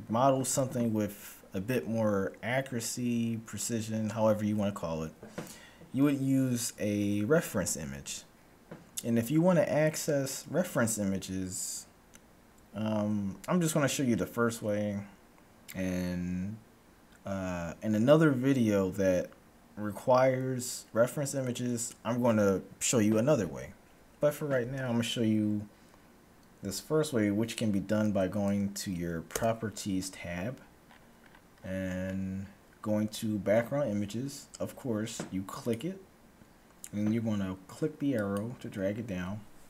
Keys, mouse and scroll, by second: 29.3 n, 30.8-34.2 middle drag, 35.7-37.5 drag, 38.2-39.6 drag.